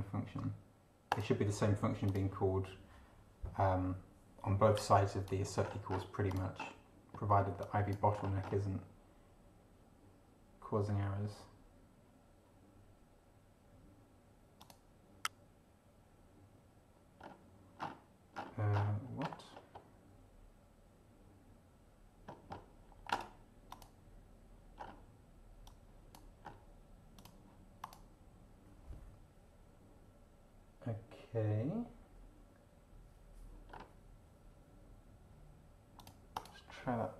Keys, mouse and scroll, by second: 1.1 click, 2.1 click, 4.8 click, 5.6 scroll down 1, 6.3 click, 7.6 click, 8.6-14.6 scroll down 1, 14.6 click, 17.2 scroll up 2, 17.8 scroll down 2, 18.3-19.0 scroll down 4, 19.4-19.9 scroll down 2, 22.5-23.0 scroll up 2, 23.7 click, 24.8 scroll up 2, 25.6-26.3 drag, 26.4 scroll up 2, 27.2 click, 27.8 click, 33.7 scroll up 2, 36.0 click, 36.3 click.